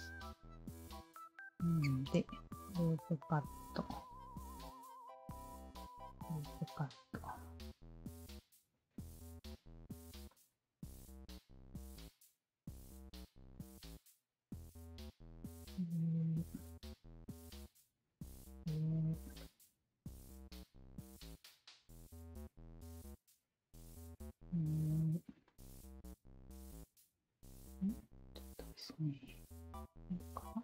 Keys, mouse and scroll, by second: 0.3 alt+click, 2.1 shift+q, 2.8 alt+click, 4.1 alt+click, 4.9 alt+click, 6.1 alt+click, 6.8 alt+click, 7.7 q, 7.9 alt+click, 8.7 alt+click, 9.5 shift+click, 10.3-12.6 alt+shift+drag, 13.6 w, 14.6 r, 15.4 alt+click, 16.6 alt+click, 17.8 w, 18.2 alt+click, 19.3-21.4 alt+drag, 21.7 alt+click, 22.4 shift+click, 23.6 r, 24.2 shift+click, 25.4-28.6 alt+shift+drag, 29.1 w, 29.7-30.6 alt+drag.